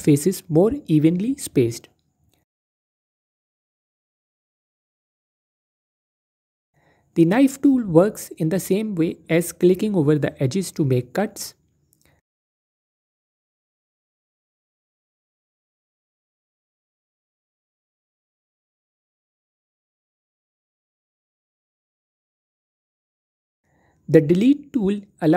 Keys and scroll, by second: 20.6 ctrl+z.